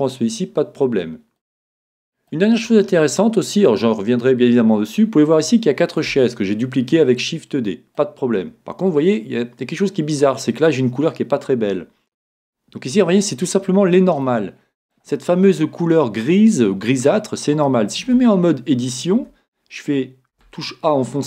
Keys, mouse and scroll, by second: 1.4-4.4 middle drag, 4.4-5.4 scroll up 1, 5.4-8.1 middle drag, 8.9-10.7 middle drag, 11.8 scroll up 1, 11.9 middle click, 14.4-16.1 middle drag, 18.0 Tab, 20.1 a, 20.3 a.